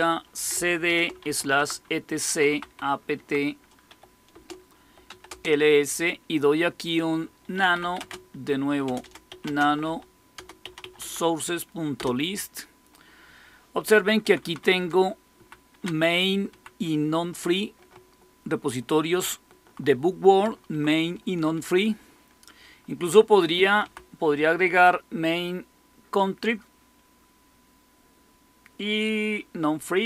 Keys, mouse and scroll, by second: 0.0-5.2 typing, 7.2-11.9 typing, 14.1 Down, 14.2-19.6 typing, 20.3 Right, 20.6 Right, 20.8-21.5 typing, 23.7 Right.